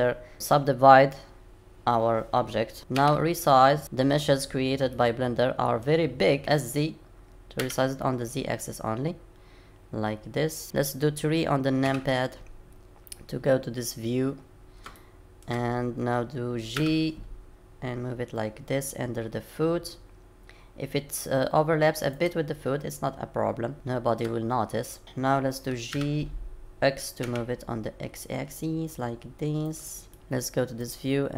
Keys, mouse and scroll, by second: 2.9 s, 3.8-4.9 scroll up 9, 4.9 middle click, 4.9-5.5 scroll up 1, 6.2 scroll up 2, 11.8 KP_3, 13.7-14.3 scroll up 2, 14.3-14.8 scroll up 1, 14.9 shift+middle click, 16.8 g, 23.4-23.7 scroll up 2, 23.7 shift+middle click, 25.0 middle click, 25.0-25.6 scroll down 4, 25.9 g, 30.0 scroll down 1, 30.8 click.